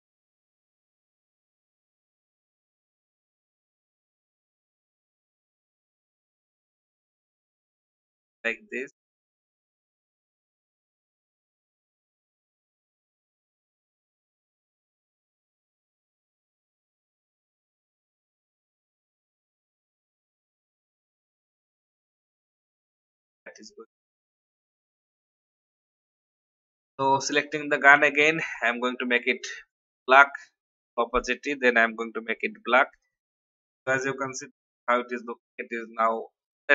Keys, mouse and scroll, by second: 0.4-19.0 drag, 21.5-21.8 alt+scroll down 1, 22.1 alt+scroll down 1, 22.8 alt+v, 23.5 click, 23.9 alt+scroll down 1, 24.7 click, 25.7 alt+scroll down 1, 26.6 click, 28.4 shift+scroll up 1, 29.0 shift+scroll up 1, 29.9-31.0 drag.